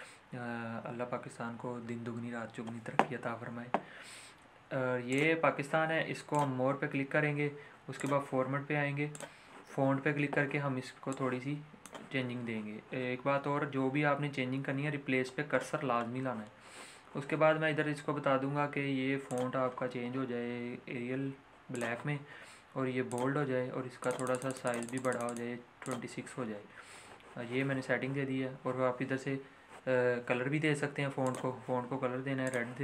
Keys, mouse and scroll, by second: 9.4-14.2 drag, 19.2 click, 20.1-21.7 scroll down 1, 21.7 click, 31.4 click.